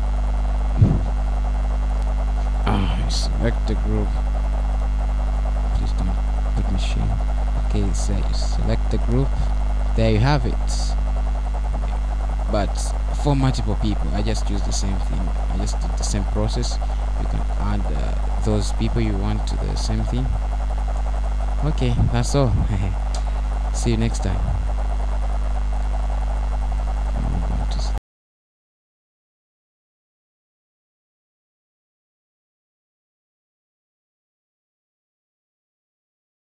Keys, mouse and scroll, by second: 0.1 right click, 6.3 click, 7.4 click, 11.5 right click, 12.9 click, 17.2 scroll down 1, 17.8 middle click, 20.5-21.6 scroll up 1, 21.6 middle click, 23.2 right click, 24.1-24.7 scroll down 2, 25.1-25.7 scroll up 2, 26.1 middle click.